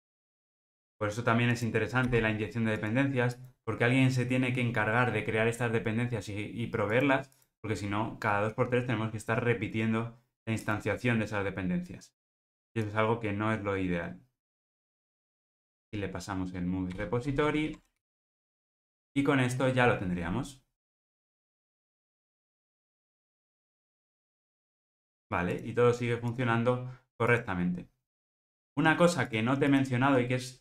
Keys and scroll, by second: 2.0 super+v, 16.9 Return, 17.5 alt+super+l, 17.9 ctrl+alt+o, 18.8 ctrl+r.